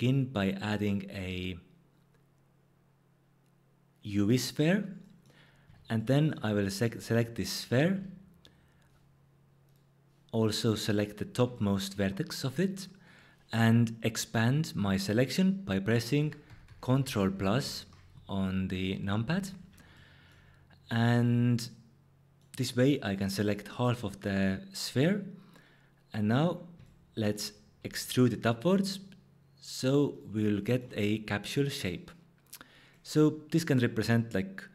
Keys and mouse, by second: 5.6 Tab, 7.9 1, 9.7 click, 10.9 click, 16.2 ctrl+KP_Add, 16.5 ctrl+KP_Add, 16.6 ctrl+KP_Add, 16.8 ctrl+KP_Add, 17.1 ctrl+KP_Add, 17.3 ctrl+KP_Add, 17.6 ctrl+KP_Add, 19.2 ctrl+KP_Add, 27.8 e, 32.9 click.